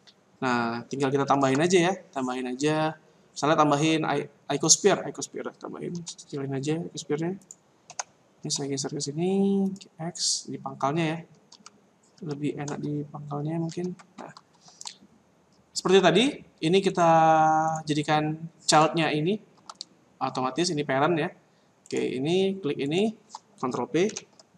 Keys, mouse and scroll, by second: 1.2 shift+a, 5.9 s, 7.9 g, 10.6 scroll down 4, 11.0-11.5 scroll up 5, 11.5 z, 12.2 z, 13.7 z, 16.9 right click, 17.7 right click, 21.8 right click, 22.8 shift+right click, 24.1 ctrl+p.